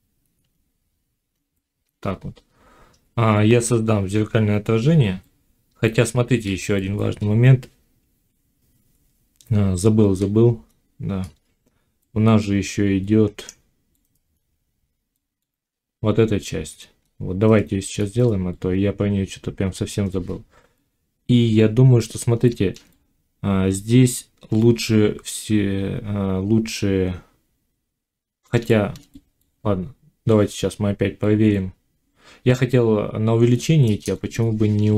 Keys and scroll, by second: 8.7 F9, 29.4 Tab.